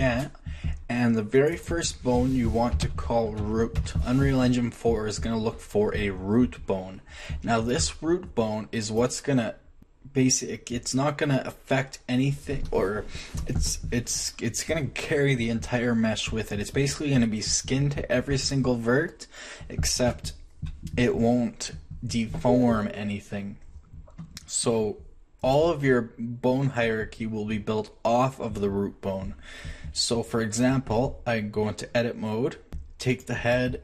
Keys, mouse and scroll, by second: 3.3 o, 7.7-8.5 middle drag, 32.7 Tab.